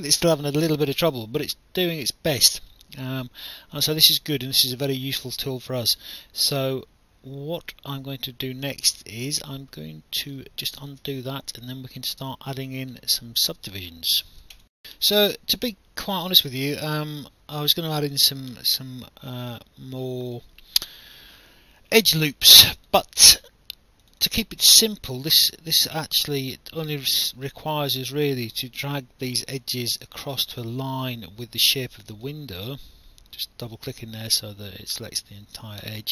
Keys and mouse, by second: 10.8 ctrl+z, 14.6 alt+F9, 20.2 click, 22.8 click, 24.0 click, 26.5 click, 30.3 alt+click, 32.0 click, 33.7 click.